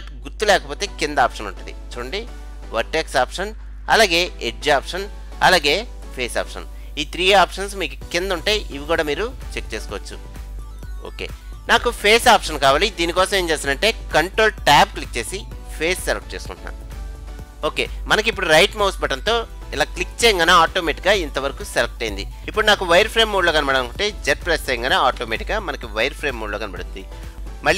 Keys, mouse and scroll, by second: 4.6-6.1 drag, 6.1-7.9 drag, 10.7-11.7 drag, 11.6-12.8 middle drag, 14.9 ctrl+Tab, 20.0-21.9 right drag, 20.9-22.4 middle drag, 25.3 z.